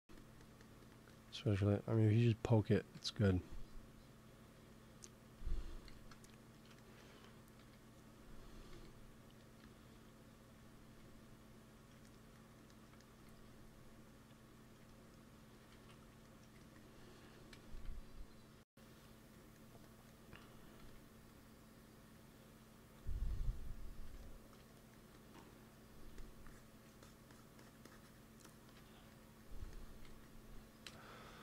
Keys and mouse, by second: 2.8 i, 4.2-7.0 drag, 5.8 g, 7.5 f, 8.0-13.0 drag, 8.6 f, 9.3 f, 10.8 f, 13.1 f, 13.9-15.0 drag, 15.7 ctrl+z, 16.5 ctrl+s, 17.5 KP_1, 18.5 KP_3, 20.7 f, 21.2-24.8 drag, 24.9 f, 26.0 f, 26.4-29.9 drag, 29.9 ctrl+s, 30.7 KP_1.